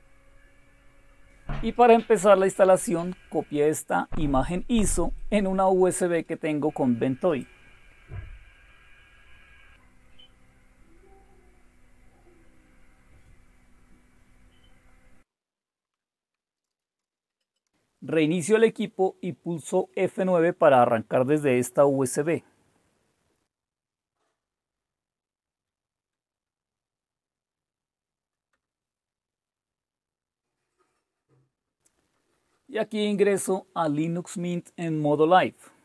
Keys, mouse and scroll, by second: 1.8 click, 2.4 right click, 3.8 click, 5.1 click, 6.1 right click, 7.3 click.